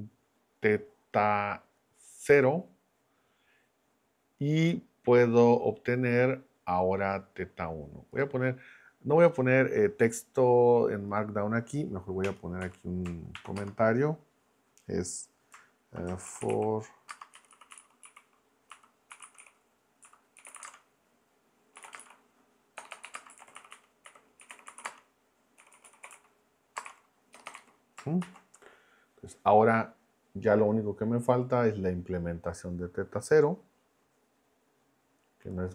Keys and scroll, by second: 12.2 Return, 12.6 Up, 13.3 shift+3, 13.6 space, 16.0-28.2 typing.